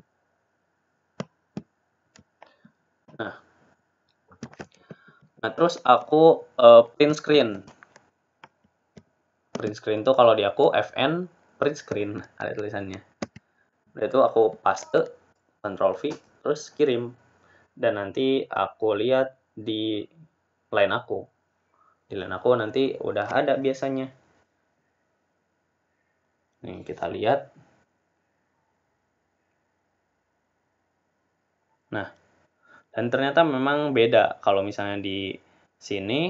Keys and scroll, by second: 10.6 Print, 22.6 Return.